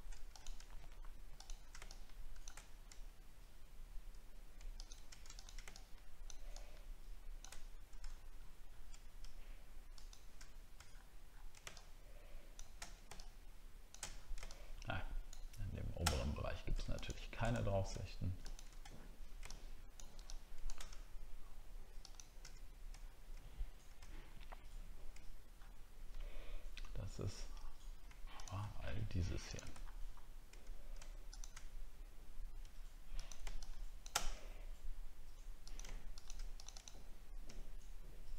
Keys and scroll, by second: 8.0 alt+scroll up 1, 8.7 alt+scroll up 1, 10.8 alt+scroll down 1, 14.1 alt+scroll down 8, 16.1 alt+scroll up 7, 17.5 alt+scroll up 1, 18.9 alt+scroll down 1, 23.0 alt+scroll down 1, 29.8 alt+scroll up 1.